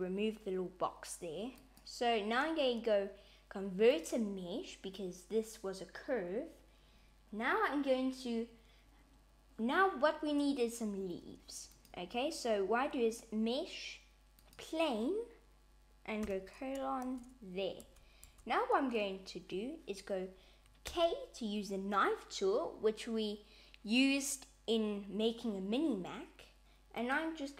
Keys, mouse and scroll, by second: 1.6 right click, 11.7 click, 16.2 /, 17.1 Tab, 17.8 Tab, 18.3 Tab, 20.9 k.